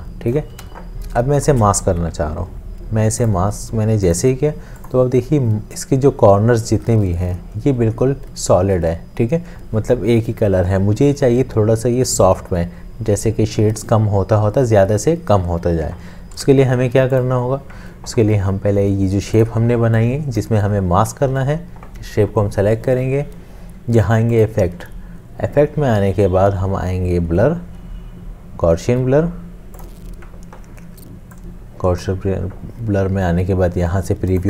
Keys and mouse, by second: 0.7 v, 1.4 shift+click, 16.4 ctrl+z.